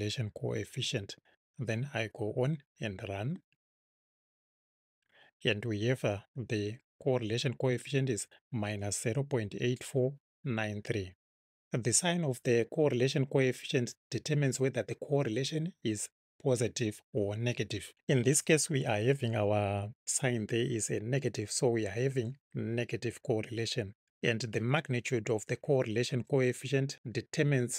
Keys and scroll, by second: 1.0 Right.